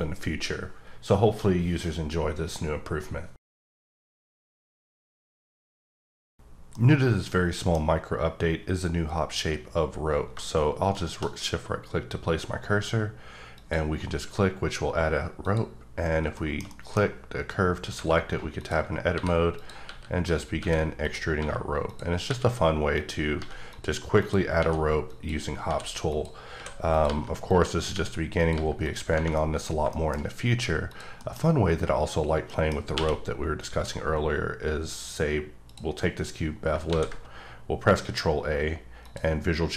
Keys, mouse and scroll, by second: 7.8-8.6 scroll up 3, 8.6-10.3 scroll down 1, 10.3-10.9 shift+scroll down 2, 10.9 shift+right click, 13.5 click, 14.2 scroll down 1, 14.4-15.4 scroll up 3, 15.4 click, 16.3 shift+middle click, 18.2-18.5 scroll down 2, 18.5 click, 19.1 e, 19.5 click, 19.9 e, 20.2 click, 20.6 e, 21.0 click, 21.8 click, 22.2 r, 22.9 click, 23.4 g, 23.7 click, 24.2 click, 24.6 r, 25.0 click, 25.6-28.5 typing, 26.1 click, 26.9 click, 27.4 click, 28.4 click, 28.8 click, 29.4 middle click, 30.4-30.9 scroll down 1, 30.9 click, 31.1-32.5 scroll up 1, 32.5 middle click, 32.9 q, 33.5 click, 34.5-35.2 scroll up 4, 35.2 scroll up 1, 35.7 click, 36.9 ctrl+a, 39.0 click.